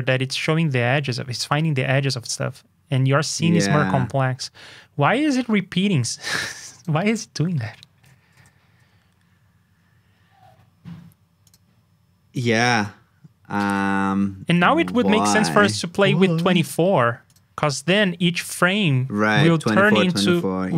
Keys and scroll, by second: 8.3 super+j.